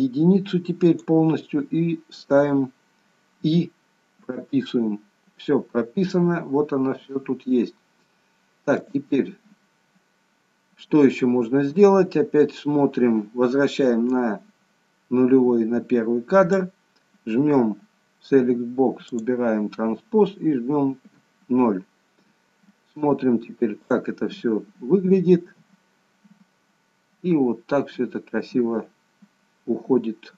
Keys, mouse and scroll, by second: 4.2 i, 7.7-8.7 scroll down 1, 8.7 click, 8.7-10.8 scroll down 1, 11.1-11.8 scroll up 1, 14.2 click, 19.0 click, 21.0 KP_0, 23.8 click.